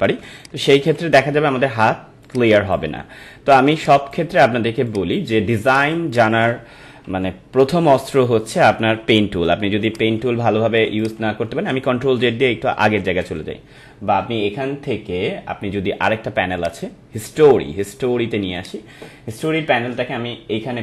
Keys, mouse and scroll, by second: 0.4-4.8 ctrl+drag, 5.9 space, 6.1 click, 7.1 ctrl+=, 8.4 ctrl+alt+z, 9.4 ctrl+alt+z, 9.9 ctrl+alt+click, 10.4 ctrl+alt+z, 11.0 click, 11.7 ctrl+alt+z, 12.8 ctrl+alt+z, 16.5 click.